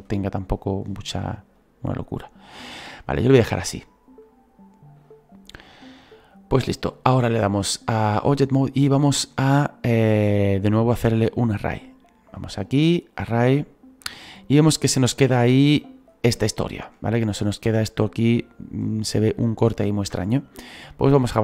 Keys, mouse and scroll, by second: 1.6 right click, 7.9 click, 8.6-9.3 scroll down 2, 9.3-13.3 middle drag, 13.3-16.1 drag, 16.1-16.5 scroll up 3, 16.5-21.4 shift+middle drag.